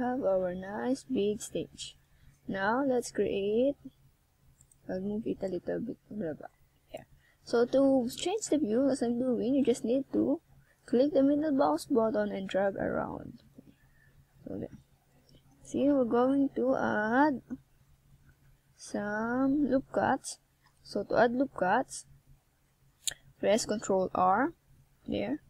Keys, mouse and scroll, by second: 0.1 click, 1.2-1.9 shift+scroll down 2, 1.9 ctrl+r, 3.8 click, 4.7 Tab, 5.0 middle click, 8.9 click, 15.6 click, 21.2 click, 22.8 click.